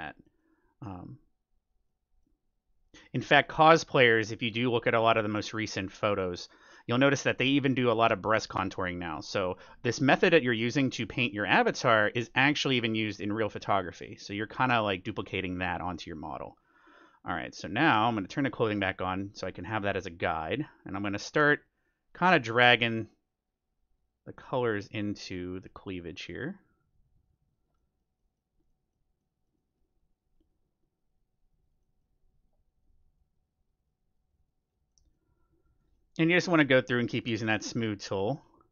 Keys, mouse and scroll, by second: 0.0-3.6 middle drag, 1.3-3.1 drag, 3.3-4.9 drag, 4.6-11.1 middle drag, 10.1-38.7 drag, 11.7-13.8 middle drag, 16.8-18.4 middle drag, 27.7-31.3 middle drag, 31.8-33.5 middle drag, 34.9-37.6 middle drag.